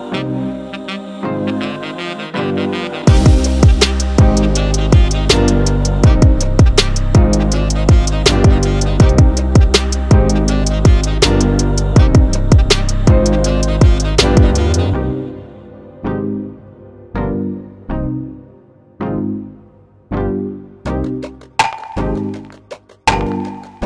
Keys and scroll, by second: 0.6-2.1 typing, 2.5 super+t, 3.0 Return, 3.3 super+t, 3.6 Return, 3.8 super+t, 4.0 Return, 5.7 super+t, 7.0 super+t, 7.9-8.8 typing, 8.9 super+-, 9.1 super+0, 10.4-12.1 typing, 12.6 Return, 12.9 super+z, 13.2 super+t, 13.4 Return, 14.3 super+-, 14.5 super+z, 15.0 super+t, 15.2 Return, 16.0 super+a, 16.3 super+d, 16.4 super+a, 17.0 super+t, 17.3 Return, 17.6-18.9 typing, 19.0 super+z, 19.6 super+-, 19.8 super+0, 20.4 alt+super+e, 20.6 BackSpace, 21.8-22.5 typing, 23.5 super+a, 23.8 super+d.